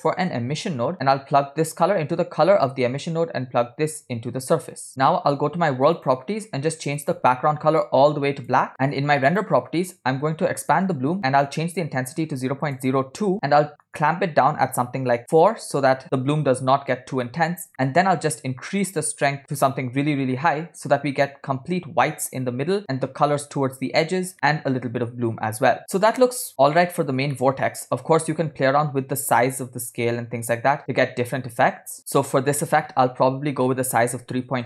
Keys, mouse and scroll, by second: 0.4 s, 1.7-2.8 drag, 3.7-5.0 drag, 6.0 click, 7.0 click, 9.3 click, 10.6 click, 11.6-13.3 drag, 13.9-15.8 drag, 17.5-17.9 scroll up 2, 17.7 middle click, 17.9 scroll down 1, 18.0-18.4 scroll up 1, 18.5 click, 20.5 scroll up 3, 24.3 scroll down 2, 24.3 middle click, 25.9 click, 25.9 scroll down 1, 26.4 scroll down 1, 26.5 click, 27.4-28.5 middle drag, 28.6-29.4 scroll up 1, 29.6-34.6 drag.